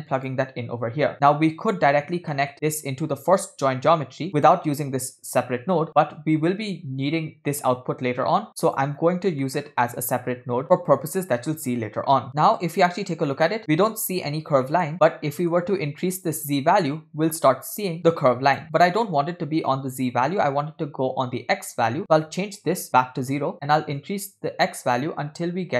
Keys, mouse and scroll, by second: 0.8-2.3 scroll down 6, 1.1 middle click, 2.3 middle click, 2.9-8.9 drag, 9.1-9.4 scroll up 1, 9.5 middle click, 9.7-10.6 scroll up 4, 11.1-12.2 scroll down 3, 12.3 click, 12.3 middle click, 13.3 middle click, 14.7 middle click, 14.9-15.3 scroll up 4, 15.4 middle click, 16.1-18.6 drag, 22.0 click, 24.0-25.7 drag.